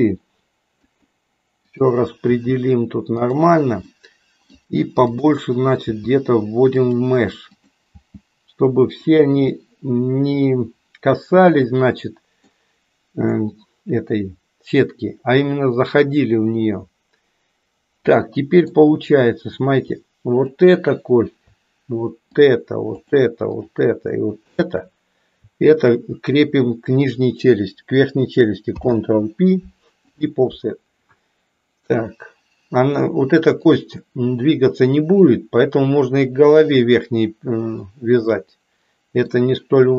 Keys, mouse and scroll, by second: 2.4 g, 3.9 middle click, 5.9 g, 8.1 g, 9.5-12.5 middle drag, 13.4-18.8 middle drag, 20.4 click, 23.0-24.0 shift+drag, 24.4 shift+click, 25.7 shift+click, 28.7 ctrl+p, 33.5 click, 38.3-39.4 middle drag.